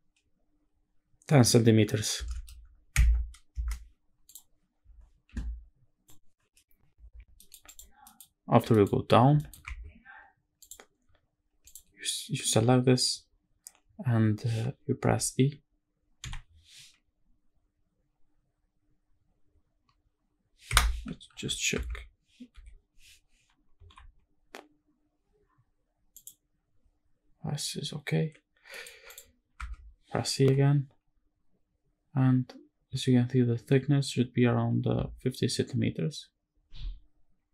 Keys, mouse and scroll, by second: 2.1 KP_1, 2.3 KP_0, 2.9 KP_Subtract, 3.5 KP_Enter, 4.3 click, 7.0 scroll down 1, 7.1 middle click, 7.4 click, 7.8 middle click, 7.9 scroll up 1, 8.3 scroll down 1, 8.4 middle click, 8.6-9.0 scroll up 2, 9.1 shift+middle click, 9.4 Tab, 10.3 click, 11.4 click, 15.9 i, 20.4 Escape, 21.0 ctrl+z, 21.4 Tab, 22.2 m, 23.6 n, 25.9 click, 28.0-28.4 scroll down 1, 28.4 middle click, 28.8 click, 29.3 Tab, 30.1 i.